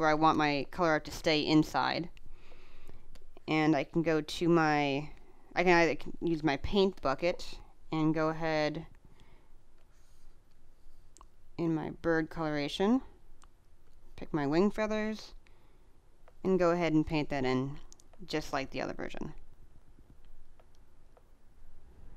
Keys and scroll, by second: 1.4 space, 7.0 space, 16.5 space, 20.3 space, 22.1 space.